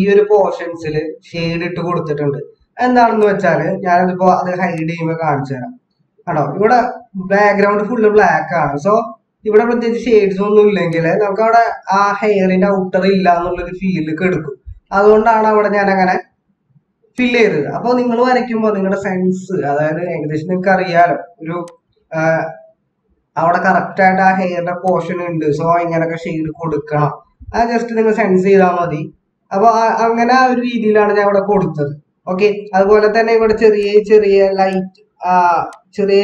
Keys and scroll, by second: 3.7 ctrl+-, 3.8 ctrl+-, 20.5 ctrl+=, 31.7 ctrl+-, 32.5 ctrl+=.